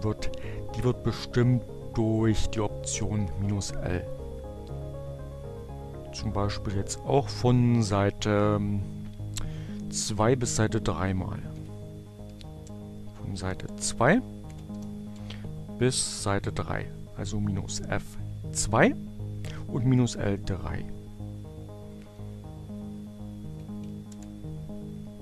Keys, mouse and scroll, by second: 1.9 Up, 3.5 Left, 9.6 -, 10.8-15.1 typing, 20.0 Right, 22.4 Delete, 22.5 b, 22.6 Return, 24.9 click.